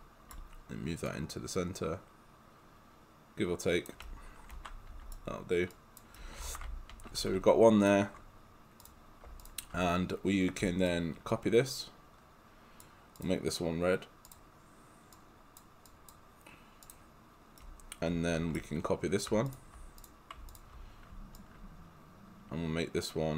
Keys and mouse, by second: 1.1 click, 4.1 right click, 5.7 click, 6.1-7.3 typing, 6.2 right click, 8.9 click, 9.4 shift+click, 10.9 alt+click, 17.6 right click, 19.5 shift+click, 20.0 click, 20.5 shift+click, 21.4 alt+click.